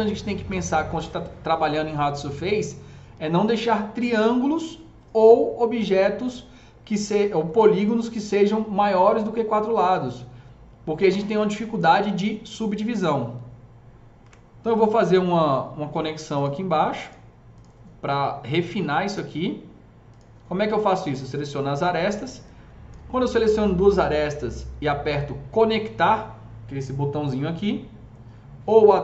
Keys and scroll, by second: 14.2 KP_0.